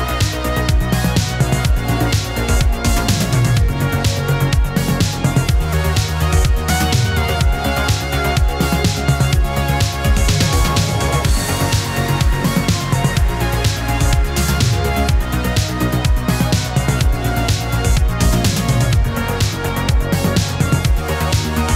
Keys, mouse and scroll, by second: 1.9-2.3 scroll down 2, 2.3-3.0 middle drag, 4.2 click, 4.8 ctrl+v, 6.3 click, 7.2 ctrl+v, 8.4 click, 9.4 ctrl+v, 10.7 ctrl+z, 11.2 click, 11.7 ctrl+v, 14.3-15.2 click, 15.0 space, 17.2-18.4 drag.